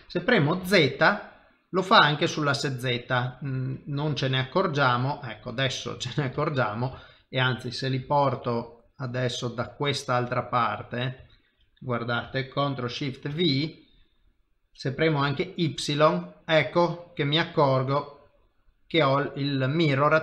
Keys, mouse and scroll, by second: 5.5 middle click, 6.4 shift+middle click, 7.0 ctrl+middle click, 8.0 g, 10.6 middle click, 11.2 shift+middle click, 11.6 middle click, 13.3 ctrl+shift+v, 18.4 middle click.